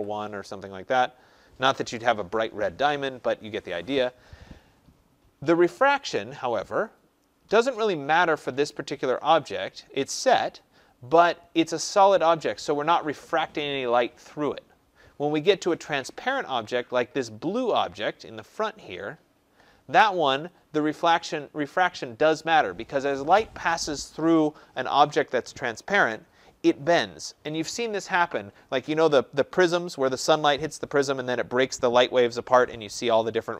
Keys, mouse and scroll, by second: 0.0-0.3 typing, 2.1 Tab, 6.7 click, 7.8 click, 20.4 click.